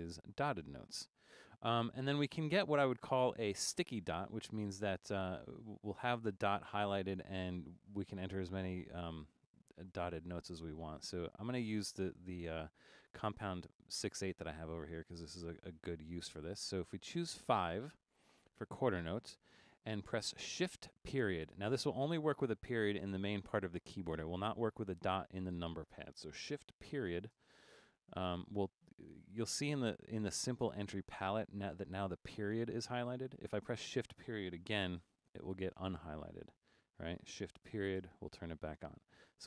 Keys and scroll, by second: 9.5 super+Right, 10.0 super+Right, 10.9 super+Right, 11.3 super+Right, 11.8 super+Right, 12.6 super+Right, 13.1 super+Right, 13.8 super+Right, 16.7 5, 27.4 shift+., 35.0 shift+., 38.0 shift+..